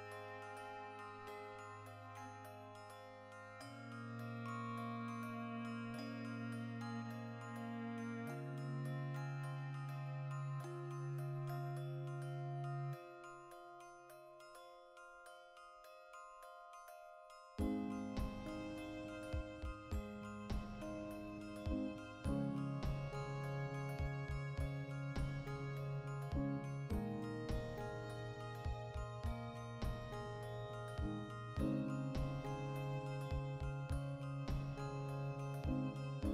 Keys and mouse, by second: 0.0 Tab, 0.4 alt+right click, 0.6-2.1 middle drag, 2.1 ctrl+b, 2.8 click, 3.1 3, 3.3-5.2 right drag, 5.2 shift+d, 5.7 2, 6.2 alt+right click, 6.9 ctrl+x, 7.3 right click, 7.5 l, 7.8 ctrl+middle click, 8.2 alt+e, 9.6 click, 9.7 ctrl+middle click, 10.3 ctrl+r, 11.4 right click, 11.5 ctrl+middle click, 12.4 click, 13.1 middle click, 13.7 alt+right click, 14.5 z, 14.9 right click, 15.1 ctrl+middle click, 15.6 shift+right click, 16.2 g, 16.8 click, 16.9 z, 18.8 click, 19.1-21.2 ctrl+middle drag, 19.8 shift+n, 20.1 a, 20.5 shift+n, 21.2 alt+right click, 21.6 ctrl+b, 22.3 click, 22.6 ctrl+r, 23.4 click, 23.5-24.8 middle drag, 24.0 ctrl+r, 24.8 click, 24.9 ctrl+r, 25.4 click, 25.5-36.3 shift+middle drag, 26.3 ctrl+r, 27.1 click, 29.5 Tab, 33.1 \, 33.7 a.